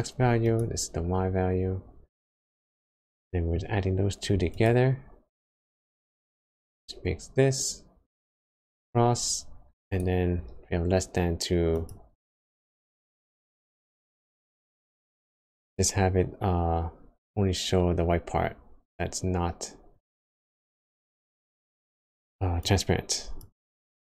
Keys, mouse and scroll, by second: 3.2 middle click, 6.7-7.5 scroll up 5, 9.9 click, 19.1 scroll down 3, 19.9 middle click, 19.9 scroll down 1, 20.7-21.5 scroll up 5, 22.6 click.